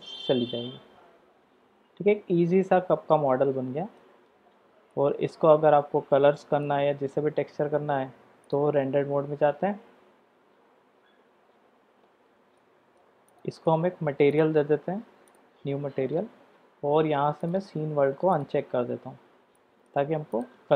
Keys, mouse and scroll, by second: 4.9-6.7 middle drag, 11.5 click, 12.6-13.0 middle drag, 13.3 click, 15.3 click, 17.4-18.9 drag, 19.5 middle click, 20.3 drag.